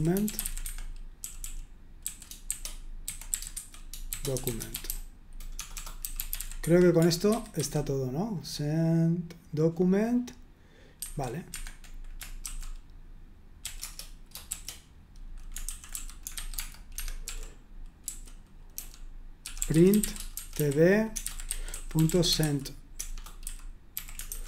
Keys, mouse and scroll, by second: 0.0-7.6 typing, 0.6 Escape, 7.3 super+1, 7.6 super+2, 11.1 super+1, 11.5 Escape, 12.4 typing, 13.6-24.4 typing, 13.8 Return, 16.9 Escape.